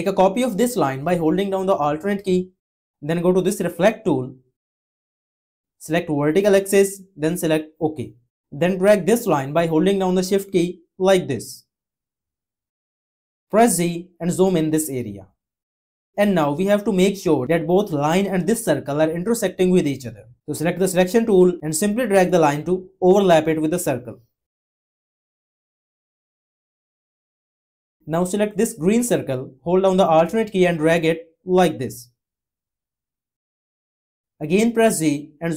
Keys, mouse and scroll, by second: 1.4-3.3 alt+drag, 10.2-13.2 shift+drag, 13.6 z, 30.0 alt+click, 34.6 z.